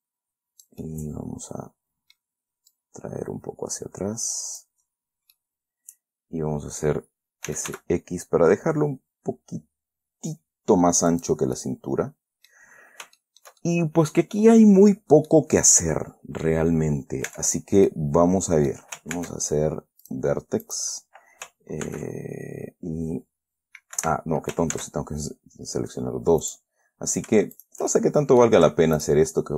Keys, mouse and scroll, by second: 1.1 scroll down 1, 1.2-2.7 middle drag, 3.1-5.1 drag, 5.1-5.7 scroll up 1, 5.7-7.4 middle drag, 7.6-8.5 typing, 11.5 click, 11.9-13.0 middle drag, 13.1-13.5 scroll up 1, 13.5-15.8 shift+middle drag, 16.1 middle click, 17.6 Tab, 18.2-19.2 middle drag, 19.5 ctrl+Tab, 20.4 click, 21.0 click, 22.2 ctrl+b, 24.3 Escape, 25.1 ctrl+z, 26.8 right click, 27.9 shift+click, 28.3 shift+middle click, 28.3 shift+scroll down 2, 29.3 shift+click.